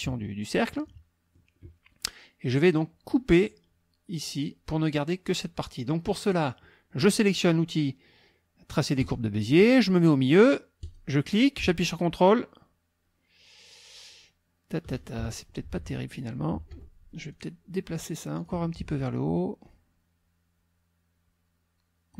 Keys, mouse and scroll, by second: 0.7 click, 9.0 click, 10.8 click, 15.2 ctrl+Escape, 16.7 F1, 17.3 click, 18.4 click, 19.7-22.1 ctrl+drag.